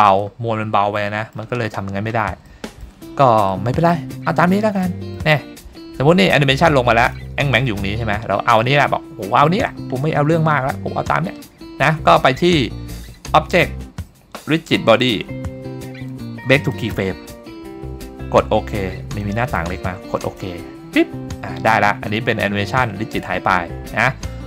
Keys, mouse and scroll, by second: 0.1 click, 1.0-1.3 shift+middle drag, 1.8-2.4 scroll up 2, 2.5-2.9 shift+middle drag, 3.5-3.9 middle drag, 4.5 scroll up 1, 4.8-5.2 shift+middle drag, 5.7-6.0 scroll up 1, 6.1 shift+middle drag, 7.0 click, 8.2-8.6 scroll down 1, 8.6 middle click, 12.9 click, 24.2-24.4 middle drag.